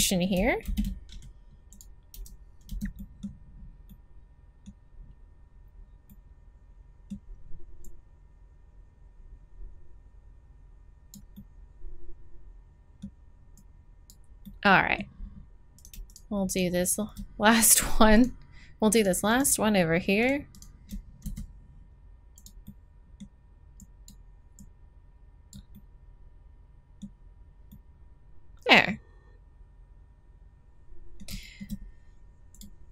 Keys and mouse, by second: 0.6 alt+m, 2.1 z, 2.6 z, 2.9 middle click, 3.1 middle click, 7.7 middle click, 7.8-9.9 drag, 11.3-13.2 middle drag, 13.5-15.7 drag, 15.7 middle click, 21.2 s, 22.5 middle click, 23.8 right click, 25.7 middle click, 29.1 middle click, 30.6 middle click, 32.5-32.9 middle drag.